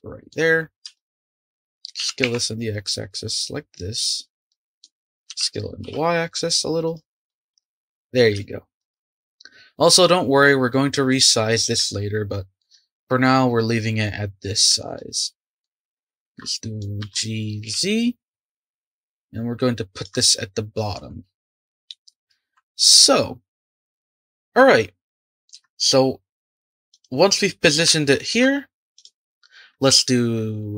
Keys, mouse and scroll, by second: 0.0-0.5 shift+middle drag, 0.5-0.9 scroll up 4, 0.9 shift+middle drag, 1.1-1.9 drag, 1.9 s, 4.5-5.3 middle drag, 5.3 s, 7.2-8.1 middle drag, 8.1-8.4 scroll down 1, 8.4-17.0 shift+middle drag, 17.0 g, 23.8-26.8 shift+middle drag, 26.9 click, 27.9-28.9 shift+middle drag, 28.9 click.